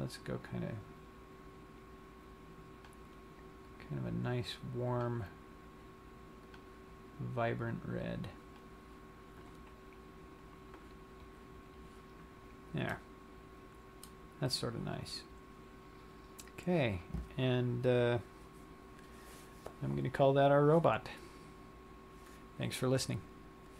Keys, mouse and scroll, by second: 6.5 click, 13.0 middle click, 15.1 scroll down 1, 16.0-16.8 scroll up 3.